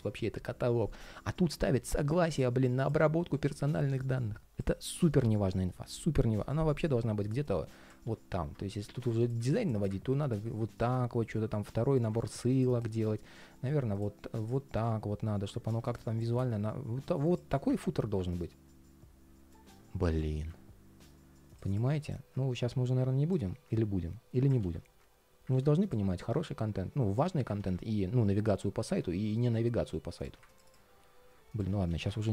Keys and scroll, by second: 7.8 super+x, 13.0 super+v, 24.3 super+x, 25.2 super+z, 27.3 super+x, 31.4 super+z.